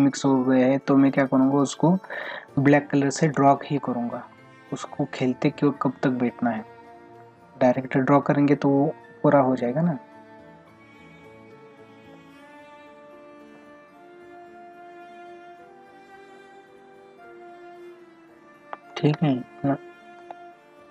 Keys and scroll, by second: 18.9 space, 20.2 space.